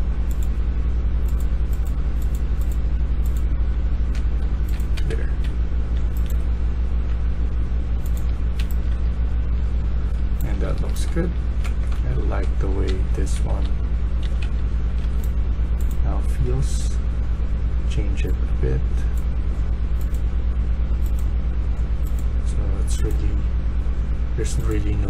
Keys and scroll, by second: 3.4-14.4 typing.